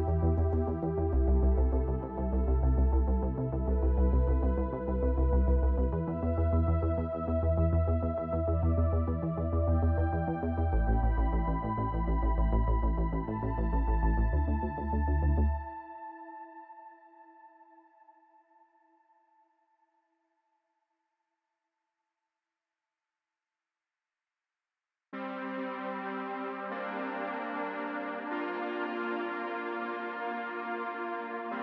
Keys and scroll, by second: 3.8 ctrl+p, 10.6 ctrl+Tab, 13.1 r, 13.3 z, 15.8 r, 15.9 r, 17.9 r, 18.0 r, 20.2 r, 22.3 r, 23.4 r, 23.5 r, 28.1 r, 29.8 r, 30.5 r, 30.8 z.